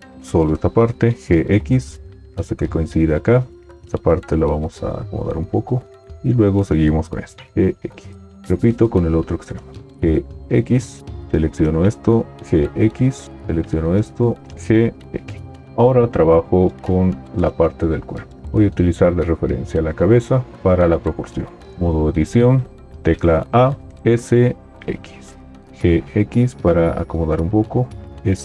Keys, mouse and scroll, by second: 1.3 g, 23.5 a, 24.3 s, 24.3 x, 25.7 g, 25.7 x, 28.1 s, 28.1 x.